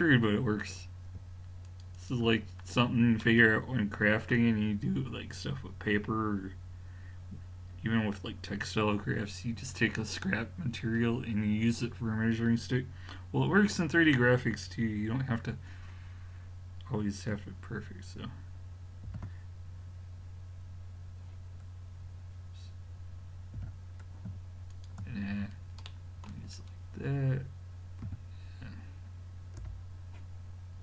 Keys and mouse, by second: 1.5 middle click, 1.7-3.2 drag, 3.2-3.8 middle drag, 19.1 shift+g, 23.6 g, 25.4 middle click, 28.1 a, 29.6 l.